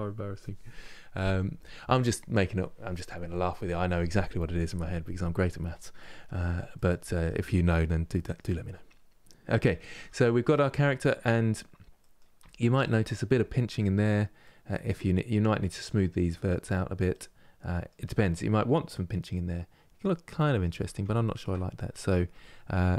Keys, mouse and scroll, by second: 5.9-6.4 scroll down 1, 6.4-8.7 middle drag, 8.7 scroll up 2, 9.7 Tab, 10.0 scroll down 2, 10.4 middle click, 11.1-11.7 scroll up 1, 11.7 middle click, 12.1 Tab, 12.5 middle click, 13.0 Tab, 13.5-15.3 middle drag, 15.3 Tab, 16.8 middle click, 17.7 Tab, 18.1-18.6 scroll down 2, 18.6-20.4 middle drag, 20.4 Tab, 20.9 shift+middle click, 21.3-22.0 scroll up 3, 22.0 Tab.